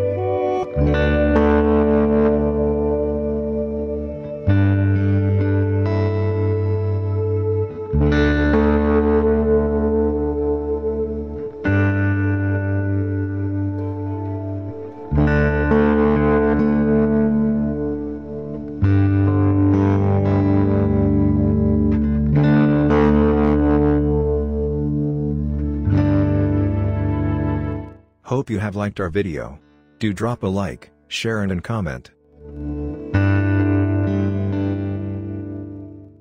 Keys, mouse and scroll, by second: 10.6-14.7 drag, 17.4 click, 18.0-19.4 scroll down 1, 19.7 click, 22.7 click, 28.3 click.